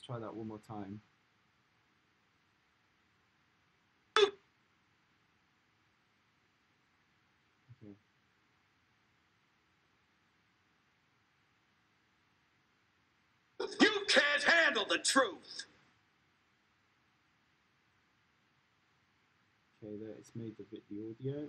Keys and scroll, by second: 4.1 space, 13.5 space, 15.7 space.